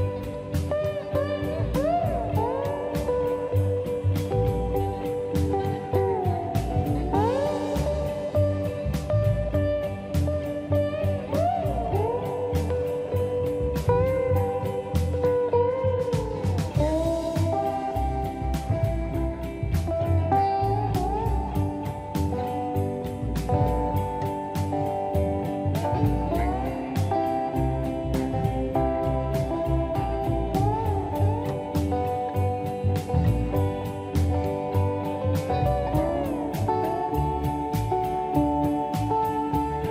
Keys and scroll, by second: 3.7 2, 3.8 Return, 4.2 space, 6.2 m, 6.8 space, 7.3 m, 9.3 space, 10.2 m, 14.1 space, 17.2 m, 24.1 2, 24.2 Return, 25.3 space, 26.4 m, 28.7 space, 29.2 e, 30.2 space, 32.7 m, 35.7 space, 37.7 m.